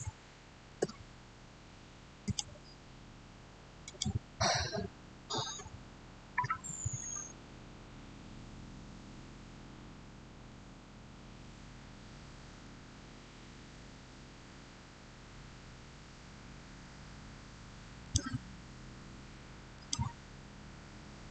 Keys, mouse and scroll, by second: 0.6 Return, 2.1 click, 11.8 typing, 12.3 Return, 17.9 click.